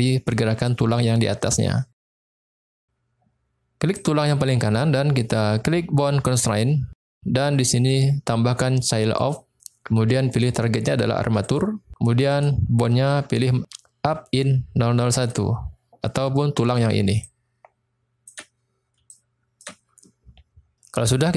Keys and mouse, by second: 6.3 click, 7.8-9.3 drag, 10.4-11.6 drag, 12.3-15.3 drag, 16.6-18.2 typing, 17.3 click, 19.0-21.3 drag, 19.5 d.